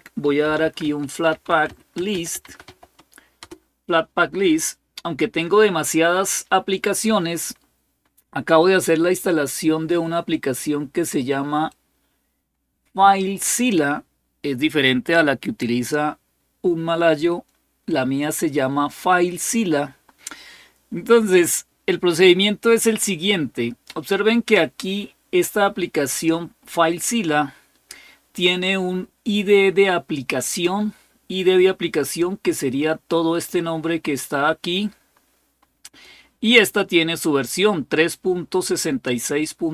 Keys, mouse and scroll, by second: 0.0-3.8 typing, 3.2 Return, 8.7-9.8 scroll up 1, 11.5-13.2 drag, 20.7-21.1 scroll up 2, 29.0-30.5 drag, 33.2-35.9 drag.